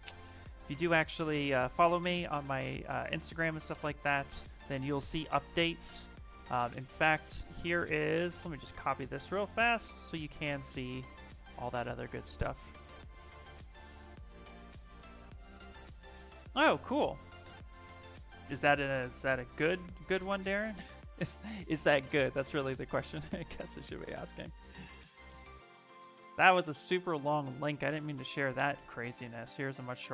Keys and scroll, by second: 1.3 ctrl+v, 3.9 ctrl+a, 4.6 BackSpace, 10.9 ctrl+v, 11.3 Return, 28.7 ctrl+v, 29.1 Return.